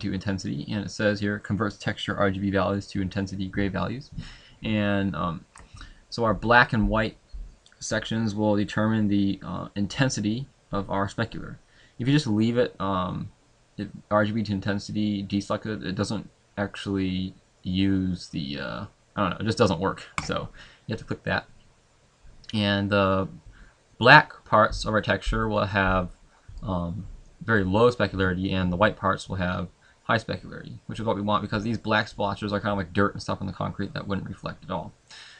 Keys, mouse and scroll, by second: 20.3 click.